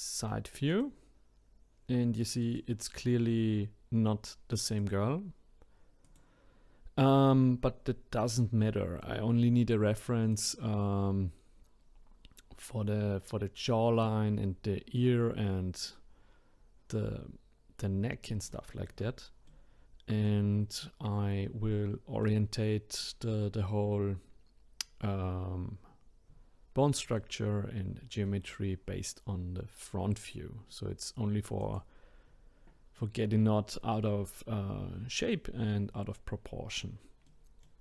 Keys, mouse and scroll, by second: 8.4-10.3 middle drag, 10.3 click, 11.0-11.8 scroll up 2, 11.8-14.4 scroll down 1, 18.5-24.2 shift+middle drag, 26.9-31.6 middle drag, 31.6 click, 37.2-37.8 middle drag.